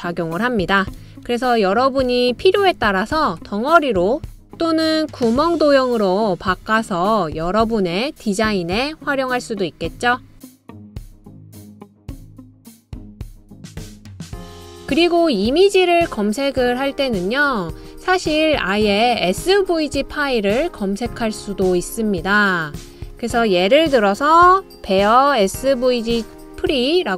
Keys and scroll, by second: 2.6 super+c, 2.9 super+v, 26.0 space, 26.9 s.